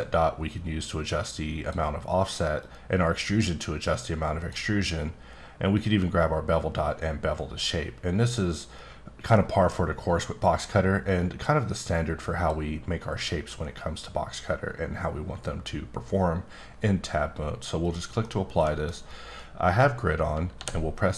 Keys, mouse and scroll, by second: 2.9-4.8 drag, 6.0-7.6 drag, 9.3 middle click, 11.0 click, 17.8 click, 18.2 middle click, 20.5 d.